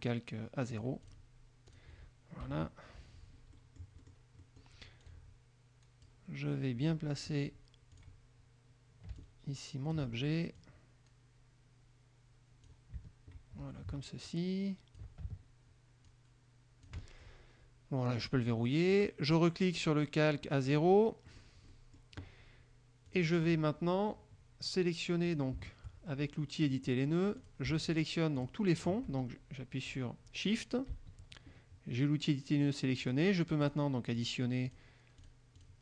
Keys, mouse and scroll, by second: 0.9-1.4 drag, 1.4 middle click, 1.8 click, 2.6 KP_Subtract, 3.7 click, 4.6 click, 5.2-6.4 drag, 8.1 click, 9.3-10.2 ctrl+drag, 10.7-13.0 drag, 14.4 ctrl+click, 16.2 ctrl+click, 18.4 click, 19.1 click, 20.8 click, 21.4 middle click, 21.4-21.8 scroll up 2, 21.9 middle click, 23.2 click, 25.4 click, 26.8 click, 27.6 click, 28.1 shift+click, 28.6 shift+click, 30.0 click, 33.2 shift+click, 33.8 shift+click, 34.3 shift+click, 34.8 shift+click, 35.4 shift+click, 35.7 shift+click.